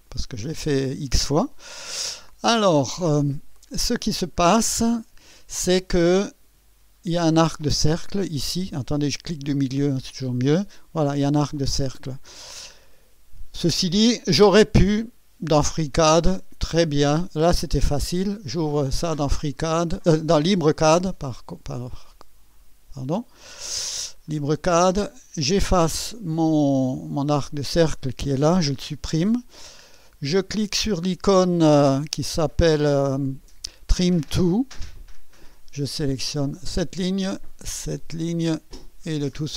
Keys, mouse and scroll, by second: 0.0 click, 3.5 middle click, 4.7-5.5 right drag, 5.6 scroll up 1, 6.1 right click, 6.8 scroll up 1, 9.4 middle click, 10.0-10.7 scroll up 1, 11.8-12.2 scroll down 1, 12.4 scroll down 1, 15.0 click, 17.6 click, 19.0-19.3 scroll up 1, 19.5-21.6 scroll up 10, 22.1-22.8 scroll up 3, 23.1-23.6 right drag, 24.3 middle click, 24.5 click, 25.1-26.3 middle drag, 27.1 click, 28.6 Delete, 34.9 click, 36.7 click, 38.5 click, 39.3-39.5 scroll down 4.